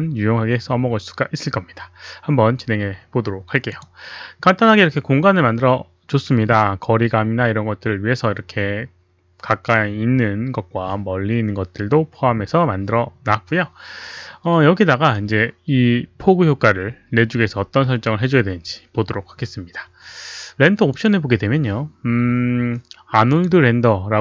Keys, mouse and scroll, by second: 3.7 click, 10.6 click, 20.9 click, 23.3 click.